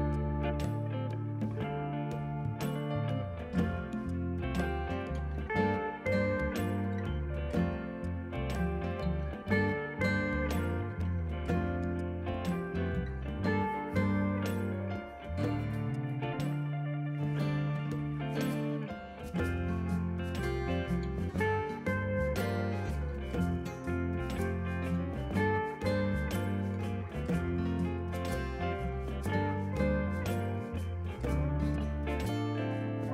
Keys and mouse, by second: 0.1 click, 0.4 a, 0.5 click, 1.0 ctrl+click, 1.2 Delete, 1.4 click, 3.8 3, 4.0 click, 4.4 ctrl+z, 5.2 click, 5.9 6, 6.1 click, 7.4 a, 7.4 click, 8.5 ctrl+1, 8.6 click, 9.5 Delete, 9.6 click, 9.7 Delete, 10.0 ctrl+q, 10.2 click, 10.8 click, 13.5 click, 15.9 ctrl+1, 15.9 Escape, 16.0 click, 19.3 click, 19.7 a, 19.7 click, 20.2 click, 31.3 Escape, 31.6 click.